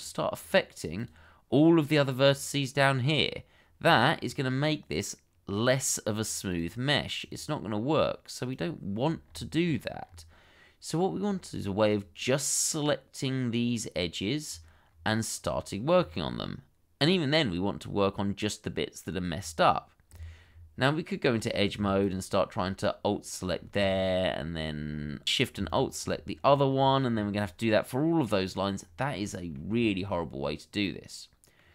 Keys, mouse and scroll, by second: 0.3 double click, 4.1-4.5 scroll down 1, 6.5 double click, 9.6-10.0 scroll up 1, 14.4-14.9 scroll down 1, 15.9-17.0 scroll up 1, 20.5 Tab, 22.0 click, 22.4 alt+click, 22.9 middle click, 23.6 scroll down 1, 23.9 shift+middle click, 24.5-24.9 scroll up 1, 25.7 alt+shift+click, 26.3-26.8 scroll down 1, 28.2 middle click, 28.7 scroll up 1, 29.2 shift+middle click, 29.5-30.0 shift+scroll up 2, 30.0 middle click.